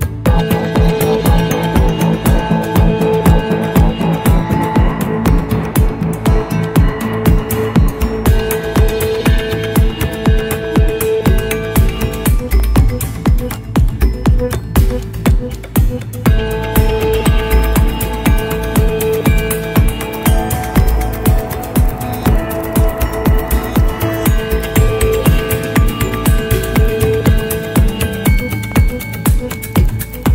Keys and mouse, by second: 0.8-1.5 shift+middle drag, 1.9-5.4 middle drag, 5.8-7.0 shift+middle drag, 8.2 shift+middle click, 9.4 click, 10.4 click, 11.6-12.6 middle drag, 12.9 shift+middle click, 13.6-15.5 middle drag, 16.1-16.7 shift+middle drag, 18.3 click, 21.9 click, 25.4 click, 28.7 click.